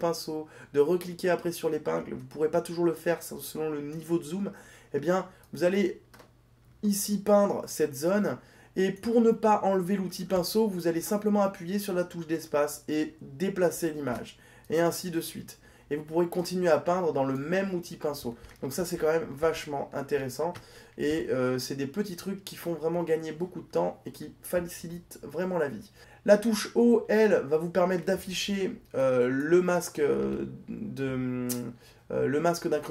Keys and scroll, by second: 27.2 o.